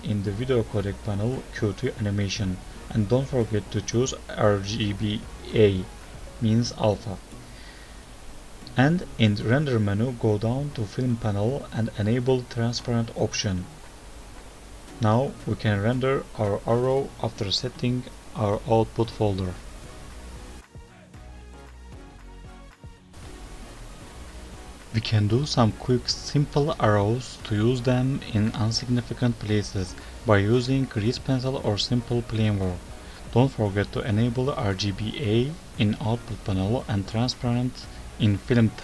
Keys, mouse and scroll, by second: 0.1-1.4 scroll down 5, 0.5-1.4 scroll up 2, 1.4 scroll down 2, 1.6-2.7 scroll up 4, 4.4 click, 7.7 click, 7.9 click, 7.9 scroll down 2, 8.0-8.6 scroll up 2, 8.6 click, 8.6-9.0 scroll up 2, 9.2-10.6 scroll down 8, 12.0 click, 14.5-16.3 scroll up 14, 17.0 click, 18.0 click, 22.6 Page_Up, 23.5 KP_0, 24.7 shift+a, 26.8 click, 28.6 click, 31.0 click, 32.3 click, 34.4 click, 35.9 F3.